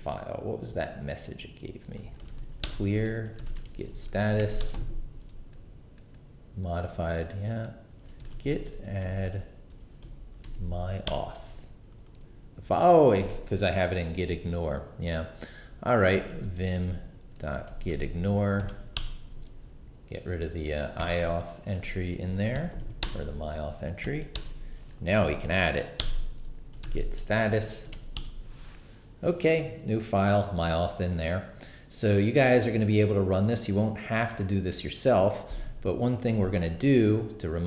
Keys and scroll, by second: 1.9-4.8 typing, 7.9-10.0 typing, 10.4 Tab, 11.1 Return, 16.0-18.6 typing, 18.7 Tab, 19.0 Return, 21.0 d, 22.1 Escape, 22.5-24.7 typing, 23.0 Return, 23.8 shift+Return, 25.1 Up, 26.0 Return, 26.5-28.4 typing.